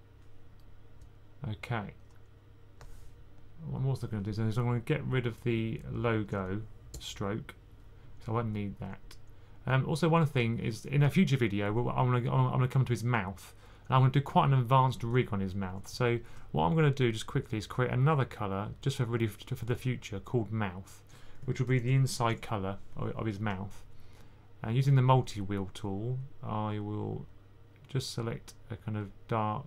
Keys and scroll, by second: 9.6-10.3 typing, 13.0 typing, 15.3-15.7 typing, 21.3-22.4 typing.